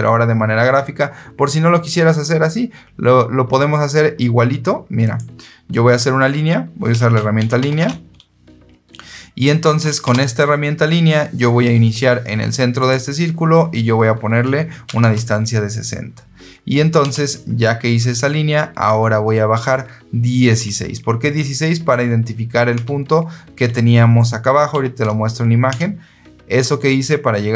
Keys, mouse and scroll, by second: 4.9 click, 7.0-8.2 typing, 9.9 Return, 12.7 click, 14.8 KP_6, 14.9 KP_0, 16.9 KP_Enter, 22.6 KP_1, 24.6 KP_6, 25.6 KP_Enter, 27.3 Escape.